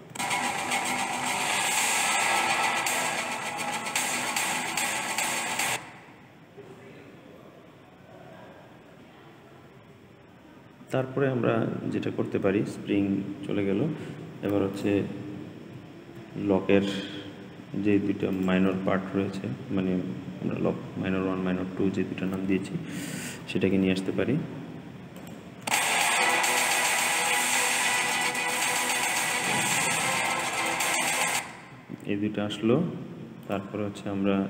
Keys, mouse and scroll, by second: 0.0 space, 6.1-7.4 scroll up 6, 7.4-9.1 scroll down 2, 9.1-12.2 scroll down 2, 13.1-14.6 scroll up 5, 14.6 click, 18.2 shift+click, 22.9 click, 23.6 g, 25.6 space, 31.2 space, 33.3 click.